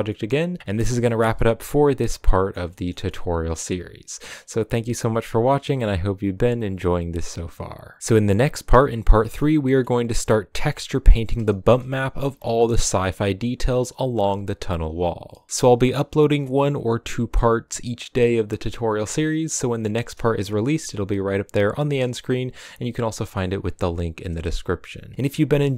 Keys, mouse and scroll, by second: 7.6-9.9 middle drag, 9.9-10.8 scroll down 2, 10.8 right click, 11.6 KP_Decimal, 12.4 shift+middle drag, 12.6 scroll up 4, 13.0 Tab, 13.4 middle click, 13.7 a, 14.5-15.5 scroll down 2, 15.5 a, 24.1 KP_0, 25.1 shift+middle click.